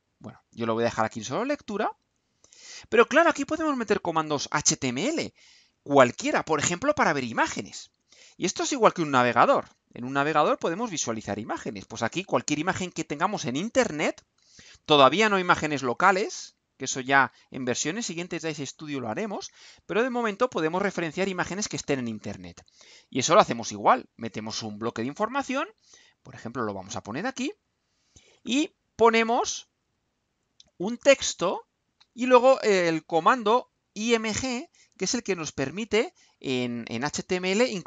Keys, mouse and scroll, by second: 0.4 click, 1.6 click, 2.6 click, 14.4-17.0 right drag, 24.6 click, 26.7 click, 27.5-28.5 drag, 29.3 click, 30.4 click, 31.4 right click, 32.3 click, 33.4 click, 33.8 right click, 35.3 ctrl+v, 37.6-37.8 drag.